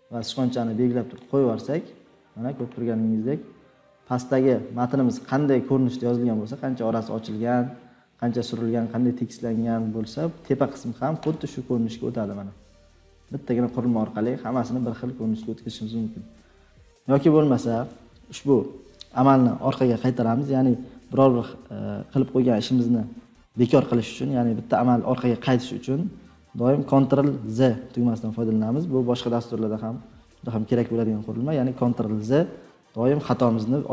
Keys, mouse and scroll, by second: 1.1 click, 2.8-3.3 scroll down 4, 3.3 scroll, 10.6 scroll up 2, 11.3 click, 11.8 scroll, 12.8 scroll, 13.7 scroll down 4, 14.5-15.4 scroll down 5, 15.9-16.4 scroll up 4, 27.4 ctrl+z, 30.9-33.7 middle drag, 30.9-31.3 scroll, 33.7-33.9 scroll up 6.